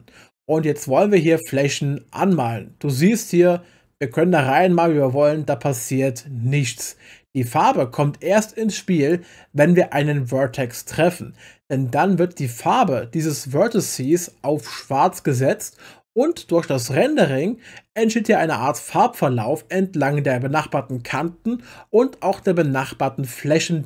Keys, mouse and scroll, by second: 2.3 click, 13.7 click, 13.8 click, 14.0 click.